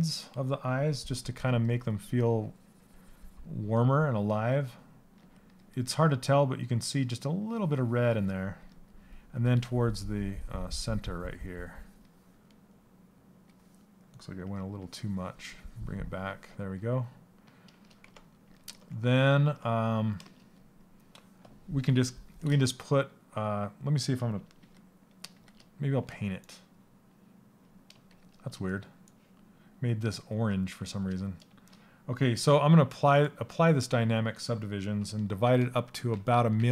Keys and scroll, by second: 24.2 shift+f, 27.7 shift+f.